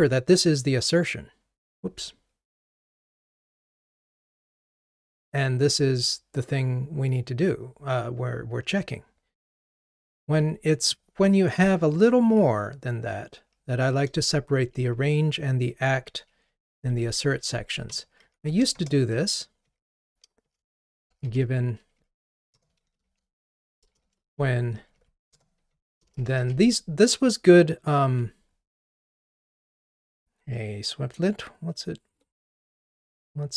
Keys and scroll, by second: 28.1 Escape.